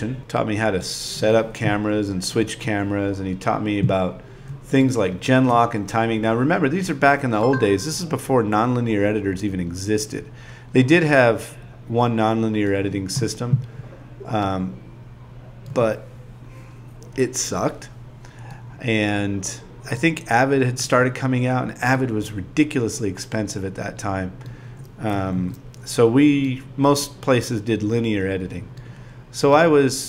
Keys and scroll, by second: 11.6 5, 11.9 5, 12.2 5, 12.3 Return, 12.5 5, 21.2 5, 22.2 5, 25.2 5, 26.5-27.4 typing, 29.5-30.0 typing.